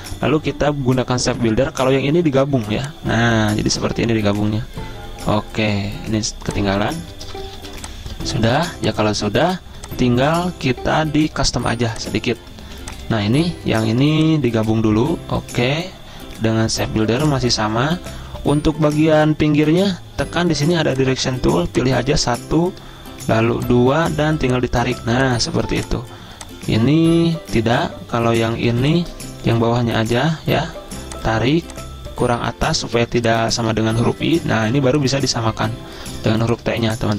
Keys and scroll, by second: 7.5 v, 7.8 z, 9.3-10.2 typing, 12.7-13.9 typing, 19.8 a, 25.9 v, 29.9 a, 35.3 z, 36.6 space.